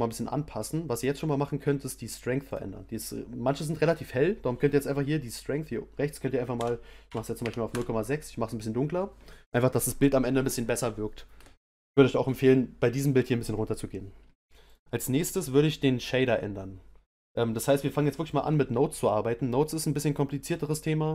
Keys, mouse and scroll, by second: 0.0-0.5 scroll down 1, 0.7-7.7 middle drag.